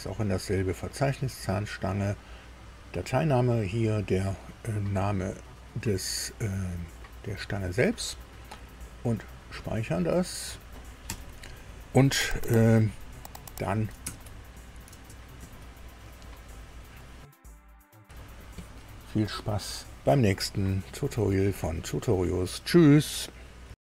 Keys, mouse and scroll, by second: 9.2 click, 11.0 super+u, 14.1 alt+Tab, 15.4 alt+Tab, 17.8 super+i.